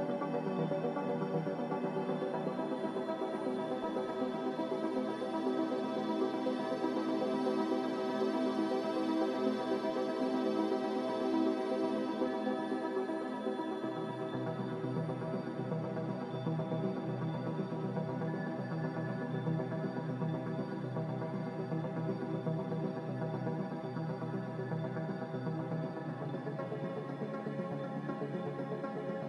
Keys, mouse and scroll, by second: 7.2 Escape, 10.9 Escape, 14.6 Escape, 16.1 Escape.